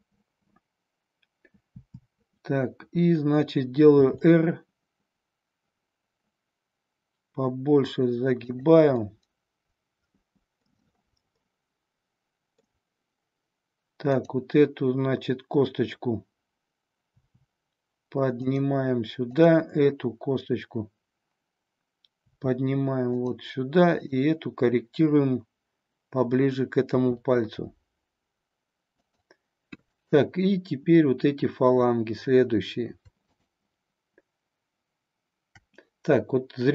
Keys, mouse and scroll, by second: 1.8 KP_7, 4.0 r, 9.1-10.7 middle drag, 11.5-12.7 middle drag, 14.1-16.4 drag, 17.2 r, 19.3-21.7 drag, 22.3 r, 23.2 click, 24.1 click, 26.9 r, 29.8-32.6 drag, 33.2-35.5 shift+drag.